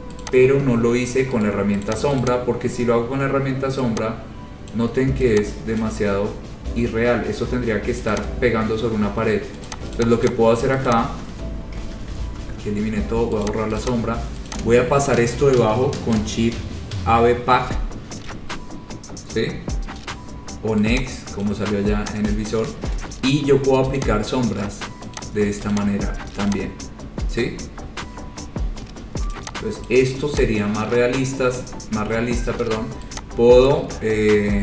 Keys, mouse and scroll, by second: 0.4 click, 1.7 right click, 2.1 click, 2.4 click, 4.9 click, 6.0 click, 7.0-7.4 scroll, 8.3 click, 9.9 click, 10.2 click, 10.4 click, 11.1 click, 11.9 Delete, 12.3 ctrl+z, 13.7 click, 14.1 click, 14.7 click, 17.8 Page_Down, 21.6 click, 22.5 click, 24.1 click, 25.4 click, 25.9 click, 26.7 click, 27.7-28.4 scroll, 30.1 click, 30.9 click, 32.0-32.7 scroll, 33.9 click.